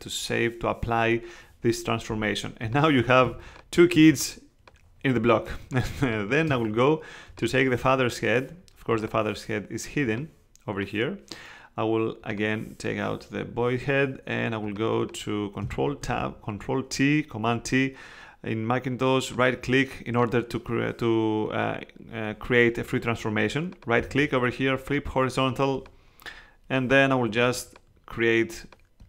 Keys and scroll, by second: 3.2 space, 16.0 super+t.